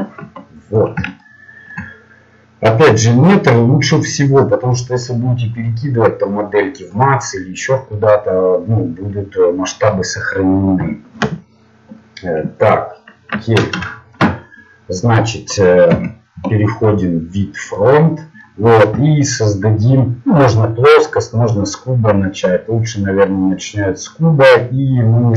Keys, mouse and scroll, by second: 1.2 middle click, 15.9 KP_1, 17.9-19.0 middle drag.